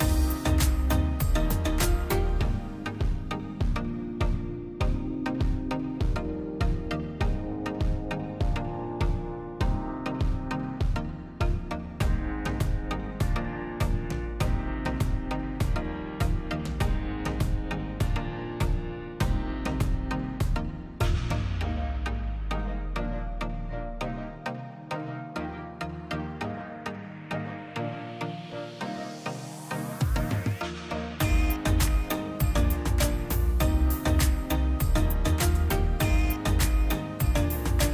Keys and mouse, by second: 0.5 click, 1.4 shift+z, 2.1-3.6 drag, 4.7-5.2 middle drag, 5.2 shift+z, 5.4-6.7 middle drag, 7.3 r, 11.6 s, 13.6 click, 13.9 middle click, 14.6 s, 16.2 s, 17.2 shift+z, 18.3 click, 19.0 middle click, 19.3 middle click, 19.5 shift+z, 19.8-22.2 middle drag, 23.0 r, 30.7 r, 35.2 3, 35.6 w, 35.7 click, 37.0 alt+click, 37.7 click.